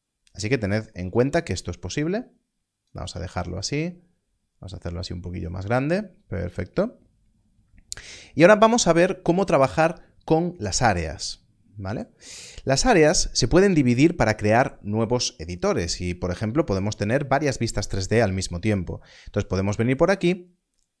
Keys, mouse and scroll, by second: 1.9 click, 3.5 ctrl+middle click.